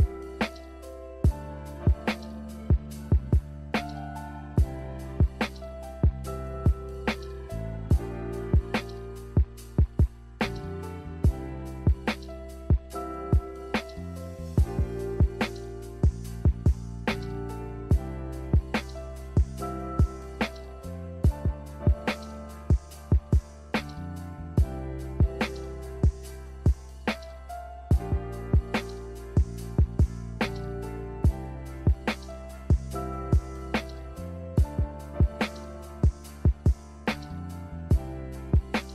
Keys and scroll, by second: 10.2 w, 11.0 a, 25.6 n, 28.9 a.